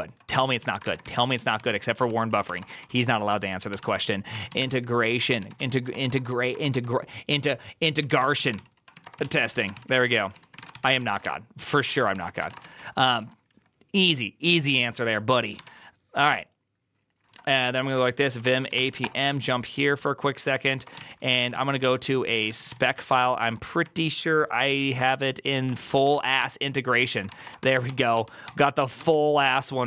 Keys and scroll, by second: 0.0-13.6 typing, 17.4 alt+{, 17.8 ctrl+f, 17.9-19.1 typing, 20.6-23.1 typing, 21.4 ctrl+p, 23.3 Up, 23.7 Down, 25.5 Up, 25.7 Up, 25.9 Up, 26.3 Return, 26.6-27.7 typing, 28.3 ctrl+d, 28.8 ctrl+d.